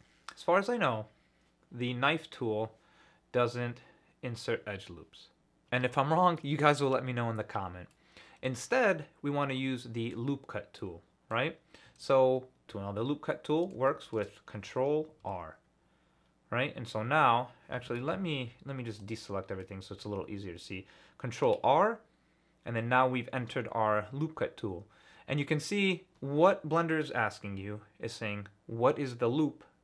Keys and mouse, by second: 7.9 middle click, 8.2 click, 10.8 click, 11.3 middle click, 13.3 middle click, 13.9 shift+middle click, 15.2 ctrl+r, 19.6 click, 21.3 ctrl+r.